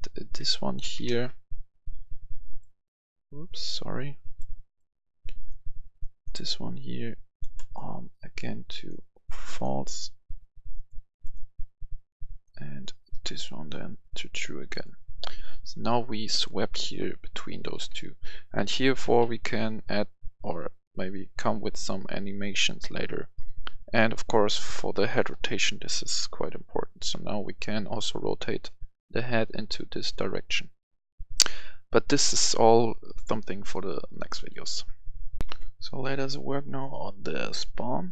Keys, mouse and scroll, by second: 0.7 ctrl+c, 1.0 ctrl+v, 1.6-7.5 drag, 7.5 right click, 8.3-17.3 drag, 17.0-19.6 typing, 21.3 typing, 25.1-25.8 typing, 34.4 Escape, 35.3 right click, 35.4 F10.